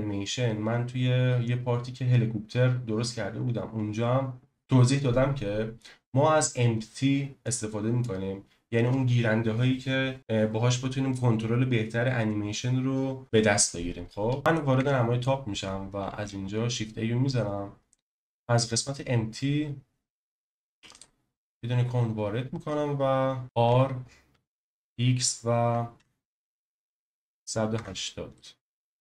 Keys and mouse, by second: 14.4 click, 14.8 KP_7, 16.1 shift+a, 23.4 r, 23.6 z, 24.6 x, 25.9 1, 26.9 8, 27.7 Return, 28.3-29.0 middle drag.